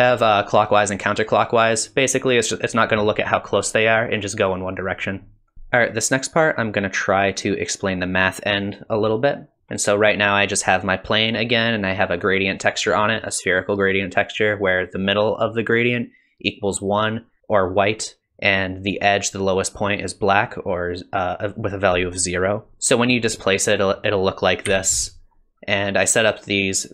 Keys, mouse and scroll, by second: 2.7 click.